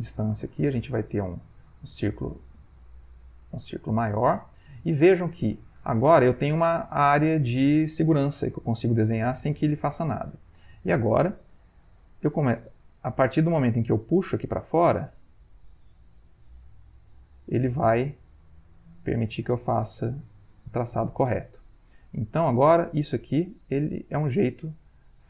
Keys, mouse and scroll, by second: 2.9 click, 4.9-21.4 drag, 23.4-25.2 drag.